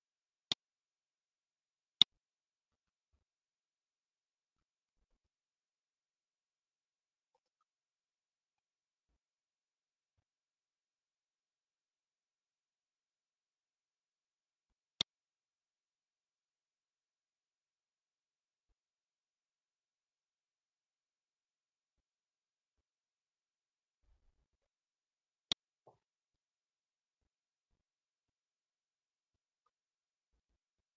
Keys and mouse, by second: 12.3 ctrl+s, 17.6 click, 19.2 middle click, 20.2 u, 25.9-30.9 drag.